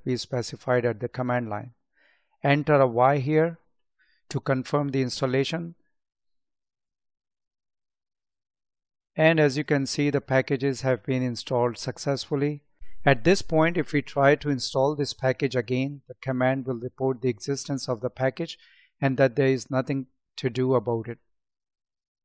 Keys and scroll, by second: 17.0 Up.